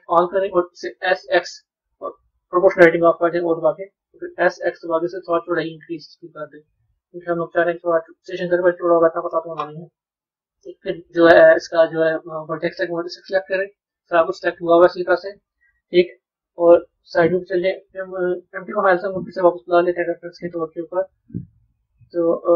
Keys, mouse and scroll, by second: 13.0 click, 13.9-16.1 middle drag, 16.1 KP_1, 18.4 click, 21.6 click.